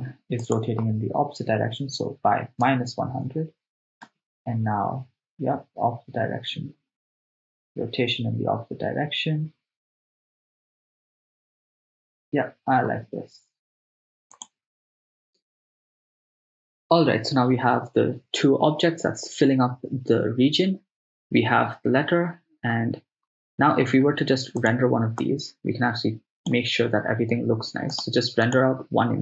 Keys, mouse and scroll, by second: 4.1 shift+space, 12.9 shift+space, 14.4 click, 24.7 click, 25.4-26.7 drag, 27.9-29.2 drag.